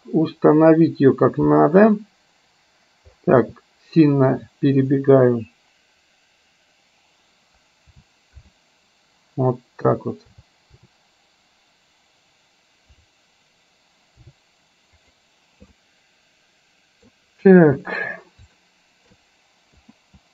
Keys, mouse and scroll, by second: 15.9-17.2 middle drag, 18.8 shift+middle click, 19.9 KP_0.